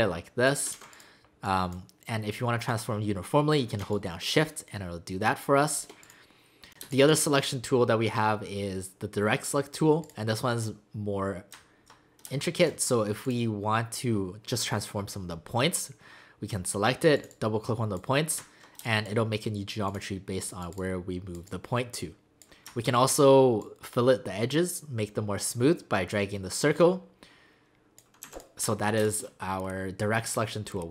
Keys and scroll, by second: 0.7 ctrl+z, 6.8 space, 12.2 space, 18.8 space, 28.2 v, 29.0 space.